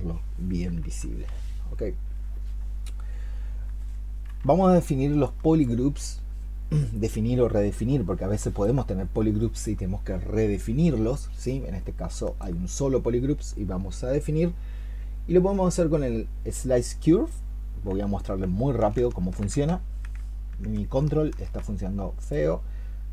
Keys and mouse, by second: 5.1 alt+click, 8.1 alt+click, 8.2 alt+click, 9.2-12.0 alt+click.